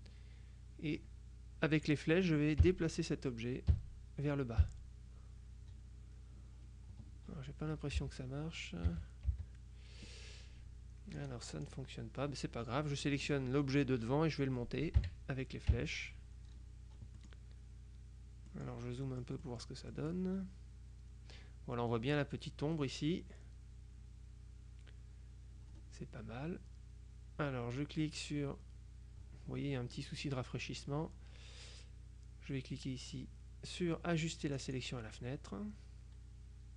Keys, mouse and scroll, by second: 2.7 Down, 3.8 Down, 4.7 Down, 8.1 Down, 9.0 Up, 9.4 Down, 11.3-12.3 drag, 15.1 Up, 15.8 Up, 17.3 middle click, 18.6 middle click, 19.5-20.7 middle drag, 34.7 click.